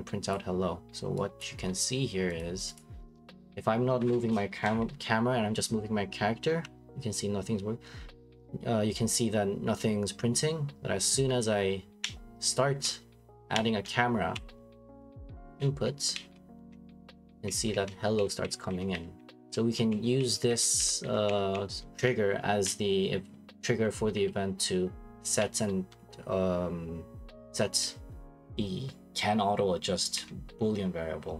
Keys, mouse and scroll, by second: 0.3 click, 2.4 click, 2.7 click.